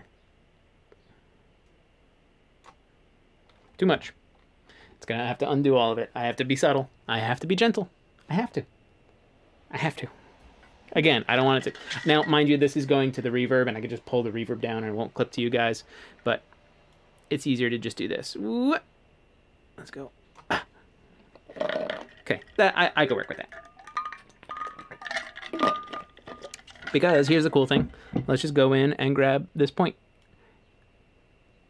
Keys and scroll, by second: 4.0 super+z, 29.6 1.